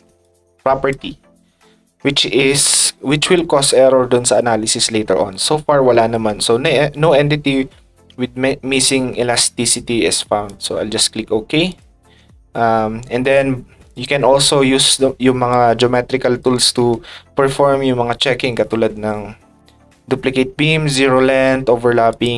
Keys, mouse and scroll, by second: 0.2-1.3 ctrl+drag, 10.4 click, 11.7 click, 13.2 click, 13.9 click, 15.5 ctrl+click, 18.5 click, 22.1 click.